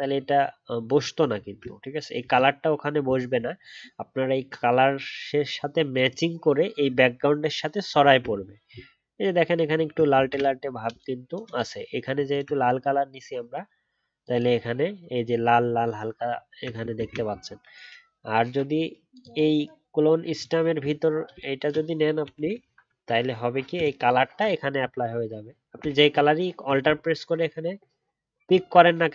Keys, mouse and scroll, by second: 0.9 alt+scroll up 1, 1.3 alt+scroll down 1, 2.2 ctrl+z, 3.5 alt+scroll up 1, 8.3-8.6 alt+scroll down 1, 8.6 alt+scroll up 1, 9.7 alt+scroll down 1, 10.1 ctrl+z, 12.3 alt+click, 15.3 alt+scroll up 1, 15.7 alt+scroll down 1, 16.9 ctrl+z, 28.4 alt+click.